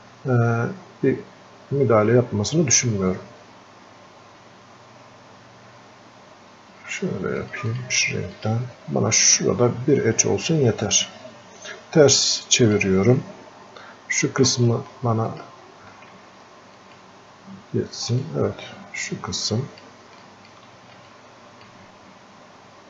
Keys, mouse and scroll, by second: 7.4 click, 11.6 click, 12.4-14.8 ctrl+shift+drag, 16.8 ctrl+shift+click, 18.5-20.1 shift+drag, 21.1-22.8 drag.